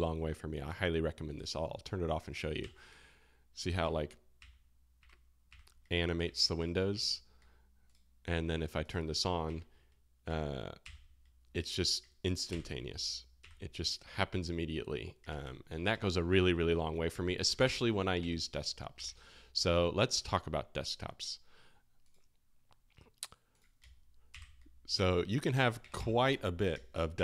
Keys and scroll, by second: 2.3 space, 2.6 [, 4.0 [, 5.2 [, 8.1 space, 9.2-10.8 typing, 12.7 space, 13.4 [, 24.3 space, 24.3 [, 24.9 space, 25.5 Escape, 25.8 Escape, 25.9 Escape, 26.7 space, 27.1 [.